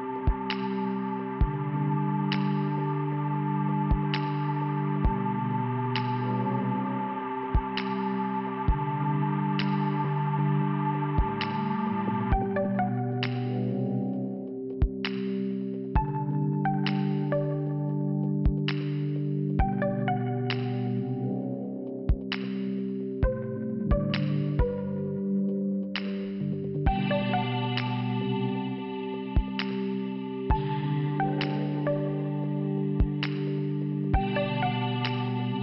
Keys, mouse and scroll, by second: 0.0 click, 1.2 click, 4.8 click, 5.9 click, 7.9 click, 11.4 click, 11.6 click, 13.3 click, 13.4 click, 15.3 click, 15.4 click, 16.2 click, 16.3 click, 17.8 click, 19.1 click, 19.2 click, 20.7 click, 20.8 click, 22.1 click, 27.0 click, 28.1 click, 28.2 click, 29.9 click, 30.0 click, 30.6 click, 30.9 click, 32.5 click.